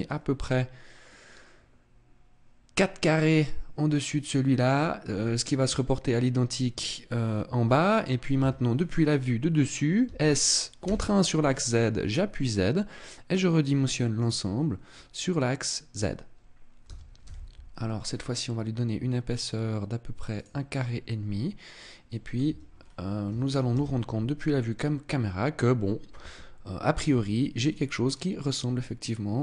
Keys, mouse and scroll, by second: 0.0 scroll up 4, 1.1-1.7 scroll down 1, 4.5-5.7 scroll down 2, 5.7-6.5 scroll down 3, 7.1-7.5 scroll up 1, 8.3 KP_1, 10.1 s, 14.3 click, 14.5-15.8 scroll up 6, 16.8 s, 20.4 click, 21.7 middle click, 22.5 Tab, 22.7-23.4 scroll down 6, 23.7 KP_0, 24.4 scroll up 2, 27.6 middle click.